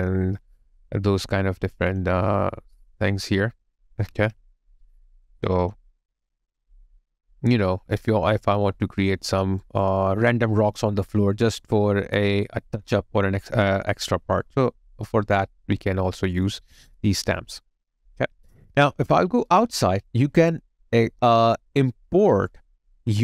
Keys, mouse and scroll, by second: 3.2 alt+click, 9.6 alt+right click, 11.4 alt+click, 12.0 alt+middle click, 12.5 alt+right click.